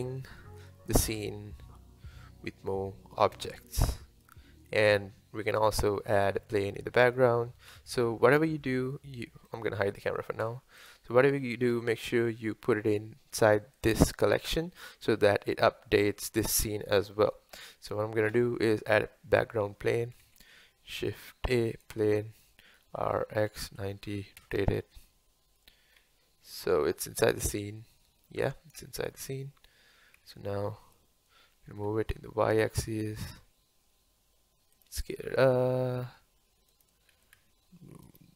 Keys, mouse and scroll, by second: 3.2 space, 4.2-6.1 drag, 6.1-7.7 middle drag, 7.7 KP_1, 9.5 click, 10.4 h, 10.8 click, 11.4-12.8 middle drag, 12.8-13.8 scroll down 1, 13.8 click, 14.5-14.9 scroll down 1, 14.9-18.3 middle drag, 18.3 KP_1, 20.2 shift+a, 23.0 r, 25.9-26.3 scroll down 2, 27.3-30.2 middle drag, 30.2 KP_7, 31.7 g, 35.4 s, 37.2 g.